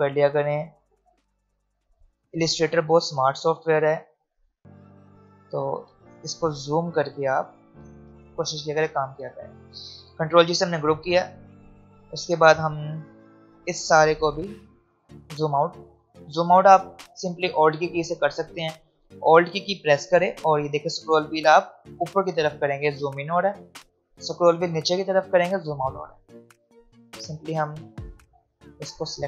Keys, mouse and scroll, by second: 1.7 shift+click, 2.7 ctrl+alt+g, 2.8-3.4 alt+scroll down 2, 3.4 click, 5.1-5.9 alt+scroll down 2, 5.9 space, 6.2 click, 6.4 space, 7.9 click, 12.1 alt+scroll up 1, 15.1-15.7 alt+scroll down 1, 19.2-21.8 drag, 21.8 ctrl+g, 24.5 ctrl+g, 25.0 click, 26.0 alt+scroll up 1, 28.2 click.